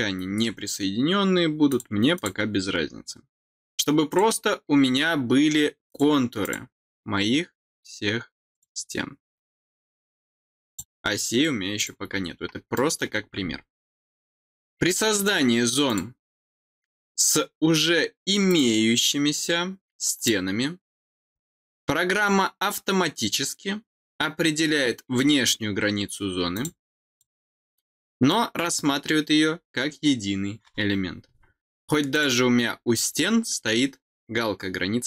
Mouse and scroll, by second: 1.6 click, 2.1 click, 4.0 click, 5.8 click, 6.3 click, 8.4 click, 10.6 click, 11.7 click, 12.6 middle click, 15.1 click, 18.4 click, 20.1 click, 26.4 click, 27.0 click, 32.0 click.